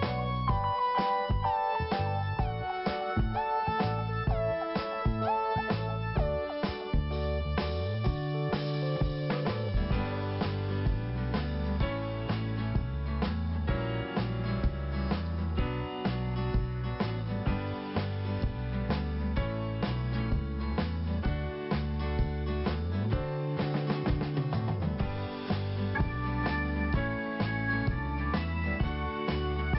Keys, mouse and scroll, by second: 0.4 click, 0.5 click, 0.8 click, 0.9 click, 2.0 click, 4.2 click, 4.3 click, 5.0 click, 5.1 click, 5.6 scroll down 1, 6.2 click, 6.3 click, 7.5 click, 12.7 scroll up 1, 15.2 click, 15.9 scroll up 1, 16.1 right click, 17.0 click, 18.2 click, 18.8 click, 20.1 right click, 20.3 right click, 22.2 click, 22.3 click, 23.4 click, 24.6 click, 25.2-25.5 scroll down 1, 26.2 scroll down 1, 28.2 scroll up 2, 29.7 click.